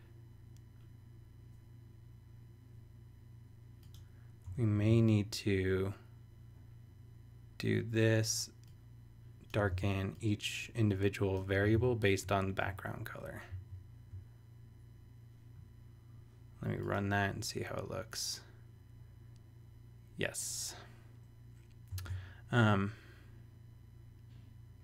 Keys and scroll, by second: 4.4 Return, 4.9 super+v, 9.7 super+c, 11.7 super+v, 13.5 super+s, 22.0 super+Tab.